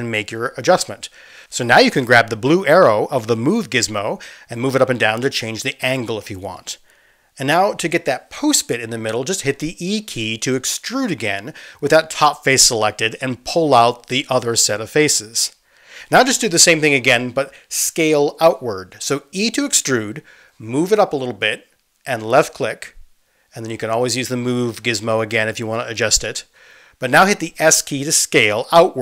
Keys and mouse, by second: 10.9 e, 14.3-18.5 middle drag, 19.7 e, 26.2-29.0 drag, 28.4 s.